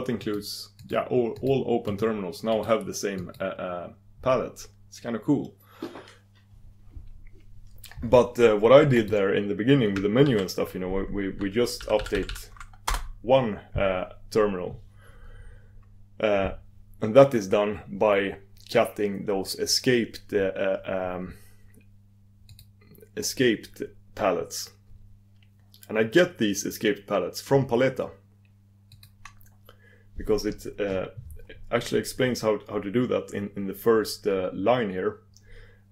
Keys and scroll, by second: 1.9 super+Return, 3.2 super+Return, 10.2 super+d, 22.6 super+d, 30.4 super+d.